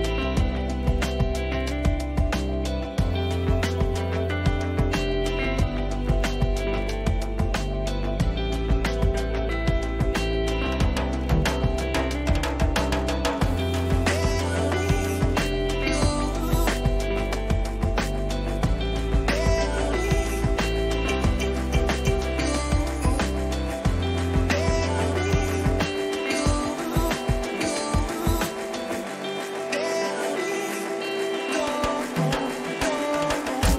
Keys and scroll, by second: 21.3 ctrl+-, 21.7 ctrl++, 29.2-30.7 typing.